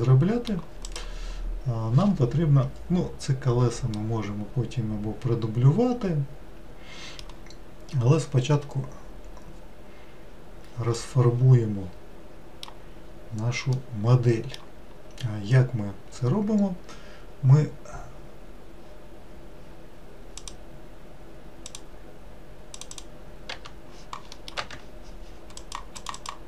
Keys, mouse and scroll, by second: 1.0 click, 4.1-7.2 middle drag, 11.1-13.2 middle drag, 13.2-13.8 scroll down 1, 13.8-17.0 middle drag.